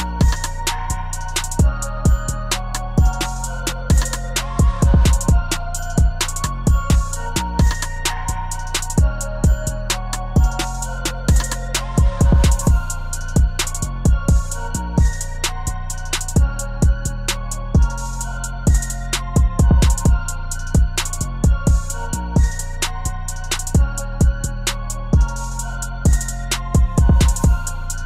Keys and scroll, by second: 9.7 ctrl+t.